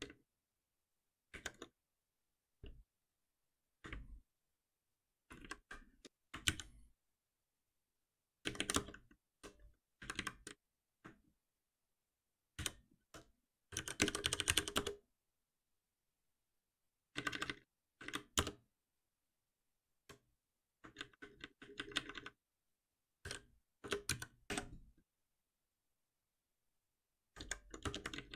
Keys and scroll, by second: 2.6 ctrl+z, 5.3 ctrl+w, 6.0 ctrl+shift+w, 6.4 ctrl+alt+p, 8.7 Return, 10.1 ctrl+w, 12.5 ctrl+alt+p, 23.8 Return, 24.5 Escape.